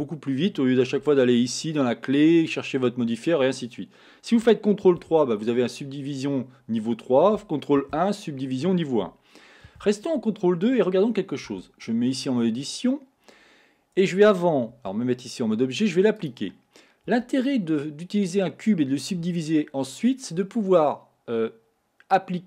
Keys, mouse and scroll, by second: 5.1 ctrl+3, 7.8 ctrl+1, 9.7 ctrl+2, 11.5 Tab, 12.2-14.2 scroll up 3, 14.9 Tab, 16.3 click, 17.1 Tab, 17.8 scroll down 2.